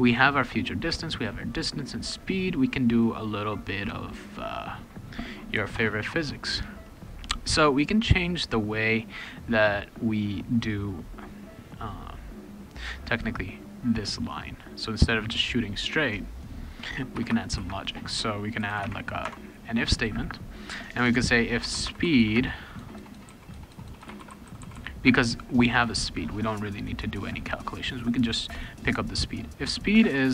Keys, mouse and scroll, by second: 0.4 click, 0.6 click, 1.0 click, 1.2 click, 1.6 click, 1.8 click, 3.5 click, 4.2 click, 5.7 shift+s, 13.7-14.8 drag, 15.9 click, 17.2 Return, 17.3 Return, 18.3-19.2 typing, 19.2 Tab, 21.4-25.3 typing.